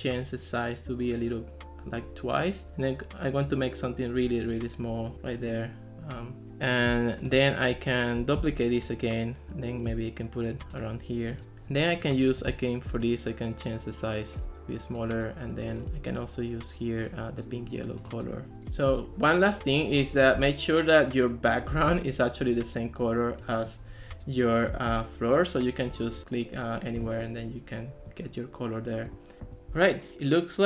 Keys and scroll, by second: 8.4 super+d.